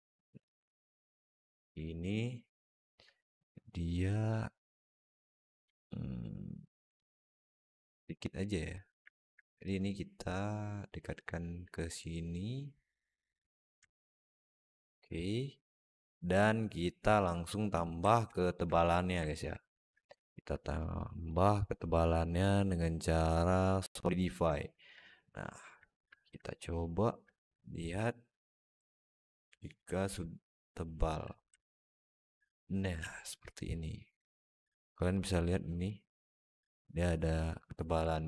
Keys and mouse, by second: 0.0 alt+middle click, 0.7 Tab, 1.3 alt+middle click, 2.6 alt+middle click, 8.9 alt+middle click, 9.5-10.7 drag, 11.6-13.3 drag, 13.7 middle click, 14.5 Tab, 14.8-17.1 alt+middle drag, 18.2 shift+middle drag, 18.5 alt+middle drag, 19.1 alt+middle click, 19.8 alt+shift+middle drag, 20.1 alt+middle click, 21.5-23.7 drag, 24.5 alt+middle drag, 25.7 alt+shift+middle drag, 26.0 alt+middle click, 27.1-30.9 shift+right drag, 31.4-32.6 alt+middle drag, 38.0 alt+middle drag.